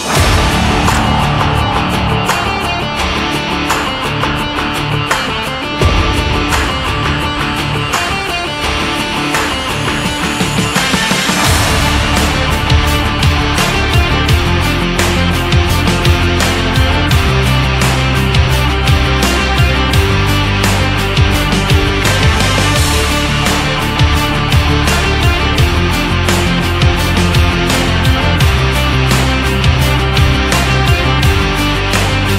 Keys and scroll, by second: 8.8 Up, 20.7 Up, 21.1 Right.